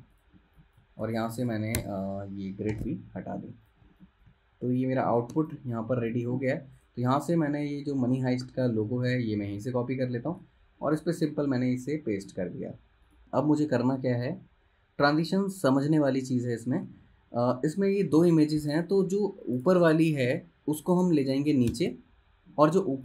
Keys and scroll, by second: 0.5 space, 2.9 super+', 4.0 space, 5.5 space, 6.1 space, 8.1 super+z, 9.2 super+c, 10.5 super+v, 16.6 space, 21.8 super+[.